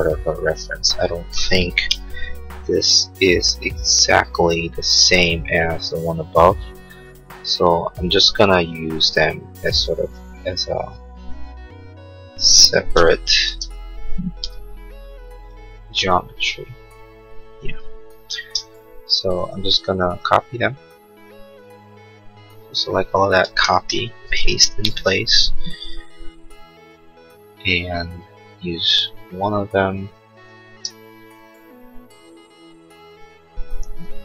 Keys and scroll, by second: 23.5 ctrl+c.